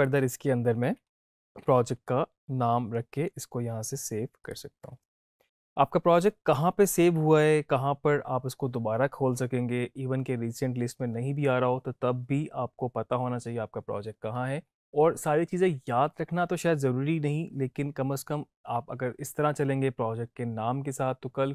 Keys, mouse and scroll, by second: 0.6-1.9 typing, 4.4 click.